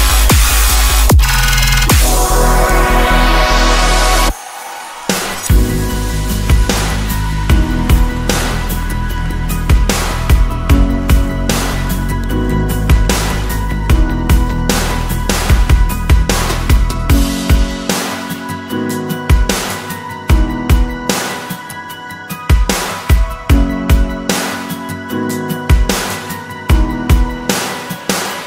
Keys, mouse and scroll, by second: 2.9 middle click, 10.2 scroll down 4, 10.7 middle click, 12.8 scroll up 4, 14.4 shift+click, 14.9 shift+click, 15.9 shift+double click, 16.3 shift+double click, 17.0 shift+click, 17.6 shift+click, 18.9 shift+click, 19.5 shift+click, 20.6 shift+click, 21.5 middle click, 22.2-23.2 scroll down 5, 23.5 scroll up 1, 24.2-24.6 scroll up 1, 25.6 shift+click, 26.4 shift+click, 27.0 shift+middle click.